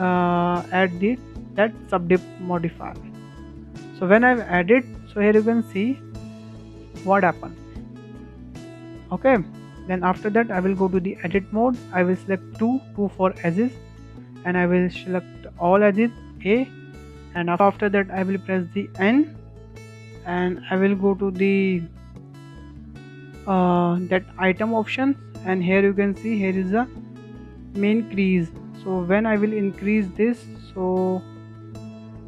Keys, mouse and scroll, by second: 3.9-5.4 shift+middle drag, 5.4-5.8 scroll up 1, 5.8-9.1 shift+middle drag, 9.1-9.5 scroll down 2, 9.5-11.3 shift+middle drag, 11.3 Tab, 12.6 2, 13.6-14.0 scroll up 1, 14.0-16.5 shift+middle drag, 16.5 a, 18.3 n, 19.4-20.5 shift+middle drag, 20.5 click, 21.4 click, 22.0 click, 24.1-24.5 shift+middle drag, 24.5-24.8 scroll up 5, 28.3-31.4 drag.